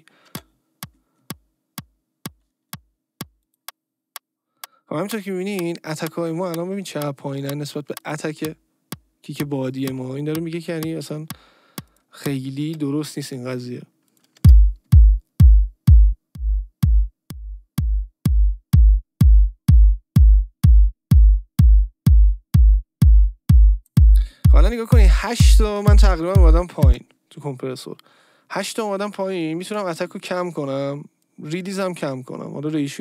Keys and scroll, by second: 0.2 space, 12.6 space, 14.3 space, 27.0 space.